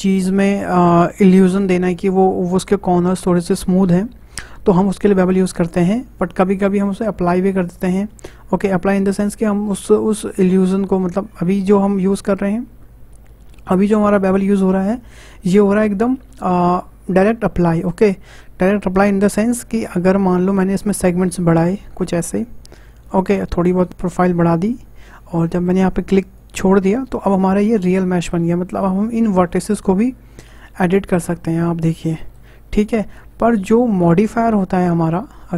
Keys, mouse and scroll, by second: 20.9-26.4 drag, 27.3-28.1 scroll up 6, 28.1 shift+middle click, 28.7 click, 29.1-30.6 middle drag, 30.6 click, 32.6 ctrl+z, 32.9-33.2 scroll down 2, 33.3 ctrl+z, 33.7 ctrl+z, 34.3 shift+middle click, 34.6 Tab.